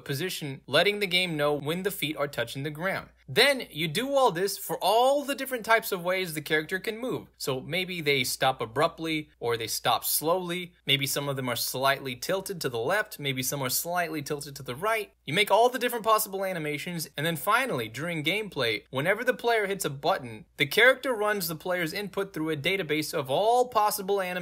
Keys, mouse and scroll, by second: 5.0 click, 6.9 click, 9.6 scroll down 3, 10.1 click, 12.7 click, 14.6 click, 17.5 click, 17.7 click.